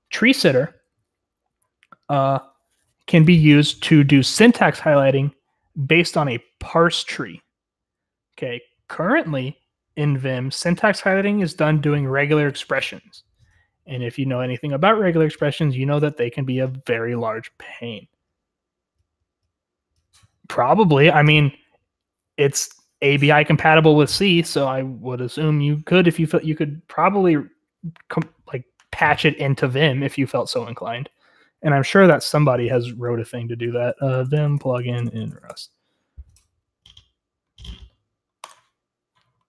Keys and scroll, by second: 33.7 ctrl+t, 33.8-36.1 typing.